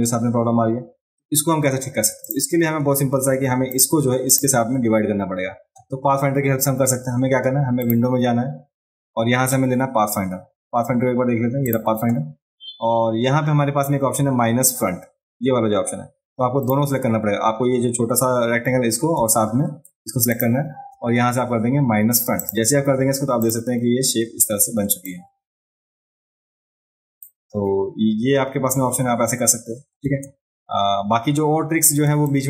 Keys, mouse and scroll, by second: 2.2 click, 3.7 click, 4.3 click, 7.8 click, 11.7 click, 16.6 click, 20.3 shift+click, 22.4 click, 23.4 click, 25.1-27.2 drag, 30.0 space, 32.0 space, 32.2-32.4 drag.